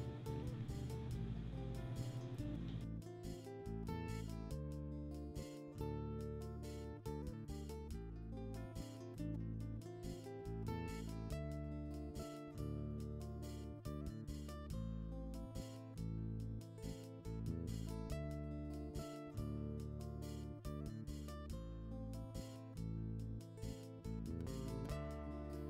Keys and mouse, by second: 0.3 right click, 1.1 right click, 3.6 right click, 4.1 right click, 6.5 right click, 7.7 right click, 8.6 right click, 10.2 right click, 10.7 right click, 11.5 right click, 12.5 right click, 13.2 right click, 13.9 right click, 14.5 right click, 15.0 right click, 16.6 right click, 17.4 right click, 18.5 right click, 19.4 right click, 20.6 right click, 22.0 right click, 23.1 right click, 24.1 right click, 25.3 right click.